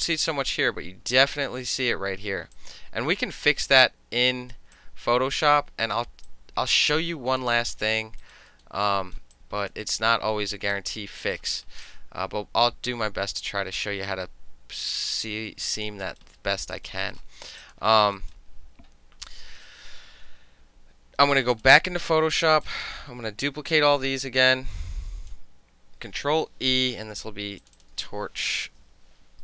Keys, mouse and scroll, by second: 0.3 alt+middle click, 0.7-1.2 alt+middle drag, 1.2-1.8 alt+drag, 1.8 alt+middle click, 2.6-4.6 alt+drag, 4.6 alt+middle click, 4.8-6.0 alt+drag, 6.0 alt+middle click, 6.4-7.5 alt+drag, 7.6 alt+right drag, 7.9 alt+middle click, 8.3 alt+right click, 8.6 alt+middle drag, 8.9 alt+right drag, 9.4-9.8 alt+drag, 10.8 alt+drag, 11.3 alt+middle drag, 11.6 alt+right drag, 11.9-15.9 alt+drag, 15.9 alt+middle drag, 16.1 alt+right drag, 16.3 alt+middle drag, 16.6 alt+middle click, 16.8 alt+right click, 16.9-17.7 alt+middle drag, 17.7 alt+click, 17.8-18.2 alt+middle drag, 18.2 alt+right drag, 18.4-19.7 alt+middle drag, 21.6 click, 22.7 click, 23.1 middle click, 23.8 shift+click, 24.6 click, 27.7 click, 27.9 click, 28.9-29.4 typing.